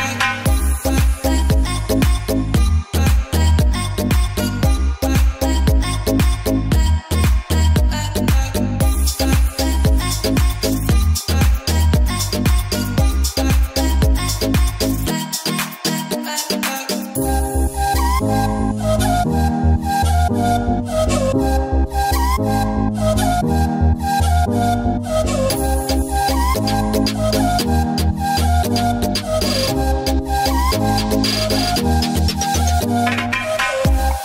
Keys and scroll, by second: 0.3 ctrl+alt+z, 1.3 ctrl+alt+z, 10.6 ], 13.2 [, 13.7 [, 19.3 space, 21.3 b, 22.8 space, 24.3 space, 25.9 space, 26.8 space, 27.8 space, 29.4 space, 33.5 ctrl+z.